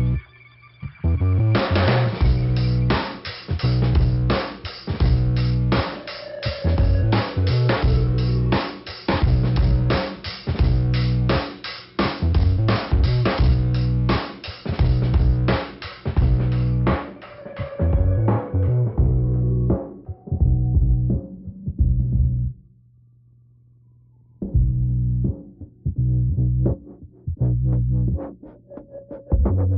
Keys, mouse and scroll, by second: 1.4 click, 2.1 click, 2.2 click, 2.8 click, 4.5 click, 5.1 click, 5.9 click, 7.2-7.6 scroll up 2, 9.4 scroll down 2, 10.2 click, 12.1 click, 16.3 scroll up 1, 16.6 click, 18.7 click, 20.8 click, 24.3 click, 25.4 scroll up 2, 26.1 right click, 27.2 click.